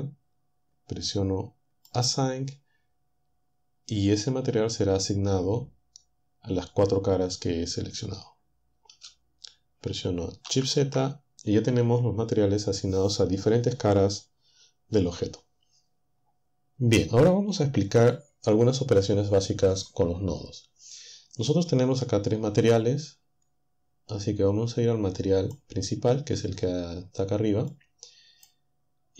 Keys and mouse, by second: 1.9 click, 9.0 0, 10.5 shift+z, 25.2 click, 27.7-29.1 drag.